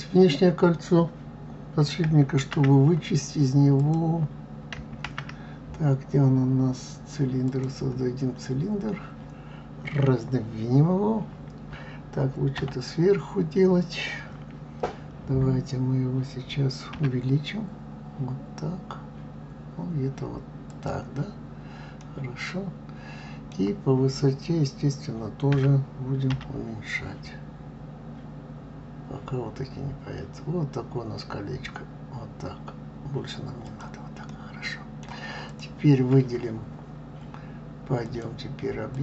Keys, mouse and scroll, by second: 3.8 click, 5.1 shift+a, 8.7-11.8 scroll down 1, 12.6 KP_7, 22.0-25.0 middle drag, 34.3-35.4 middle drag, 35.4 click, 38.0-39.0 drag.